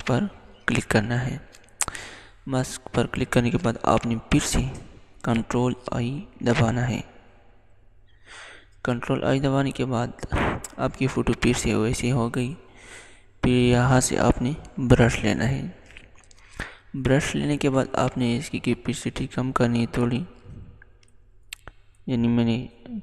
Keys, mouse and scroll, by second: 0.0 click, 5.6 click, 6.2 ctrl+i, 13.7 click, 17.3-23.0 drag.